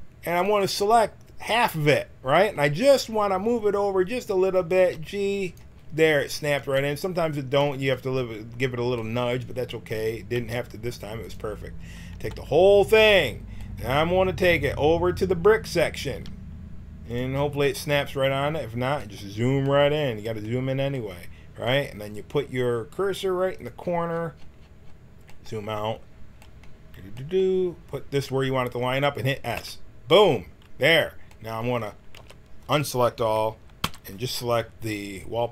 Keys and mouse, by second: 4.7 g, 6.5 b, 10.3 g, 12.1 b, 16.1 g, 23.5-27.6 right drag, 29.7 s, 32.1 a, 33.8 l.